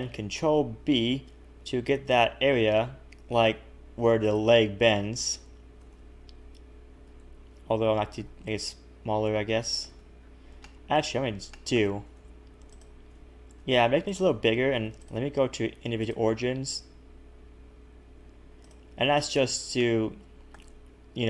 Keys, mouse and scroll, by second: 0.2 ctrl+r, 0.6 ctrl+b, 3.4 b, 5.8 a, 5.9 a, 7.1 ctrl+z, 7.2 ctrl+z, 7.6 scroll up 1, 8.2 s, 9.9 a, 10.0 a, 10.2-10.6 scroll down 4, 10.8 shift+middle click, 11.2-11.5 scroll up 3, 11.5 shift+middle click, 12.7 alt+shift+click, 15.0 click, 16.6 s, 18.9 a, 19.0 a, 19.3 scroll down 2, 19.8 shift+middle click, 20.9-21.2 scroll up 2.